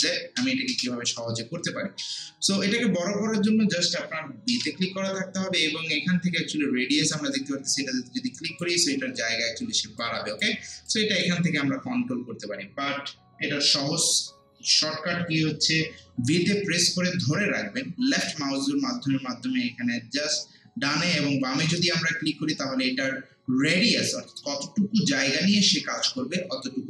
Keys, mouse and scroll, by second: 4.5 b, 7.7-13.7 drag, 14.4 scroll down 1, 14.8 scroll up 1, 17.2-19.5 typing.